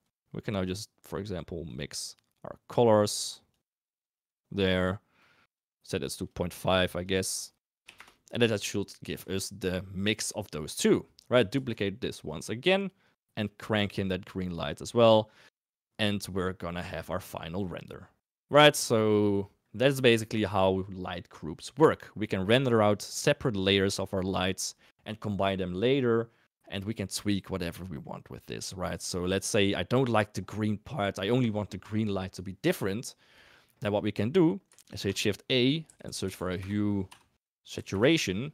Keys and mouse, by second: 0.7 click, 1.0-1.7 drag, 2.2-3.2 drag, 3.5 click, 4.5 middle click, 5.2-5.7 drag, 7.1 click, 9.3 shift+middle click, 11.6 shift+d, 13.8 click, 19.9 shift+click, 27.8 middle click, 28.8 click, 30.0 click, 30.7 middle click, 33.3 middle drag, 34.7 shift+a, 37.4 ctrl+a.